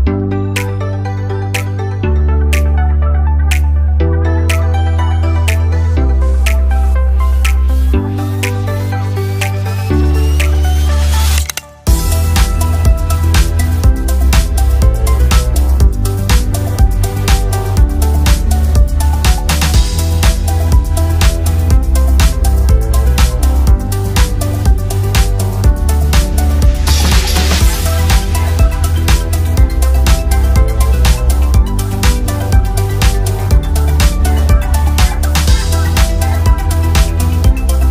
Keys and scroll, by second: 4.1 ctrl+a, 15.7 ctrl+a, 25.2 ctrl+g, 28.2 ctrl+z.